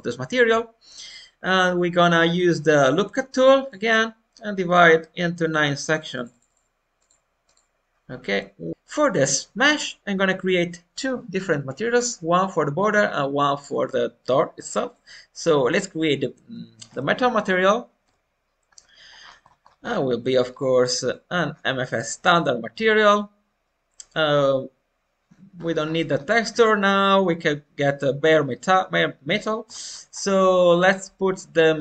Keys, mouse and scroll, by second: 1.0-2.2 drag, 2.2-3.6 middle drag, 3.6 click, 4.6 click, 8.7-11.4 middle drag, 14.8-19.1 drag, 19.1 scroll down 2, 20.4-21.4 drag, 20.4-21.1 scroll down 3, 21.4 scroll down 2, 22.7-24.7 drag, 25.2-25.5 scroll up 2, 25.8-26.1 scroll up 2, 29.4 scroll down 1, 29.4-30.3 scroll down 3, 30.1-30.4 scroll up 2, 31.7-31.8 drag, 31.7-31.8 scroll up 2.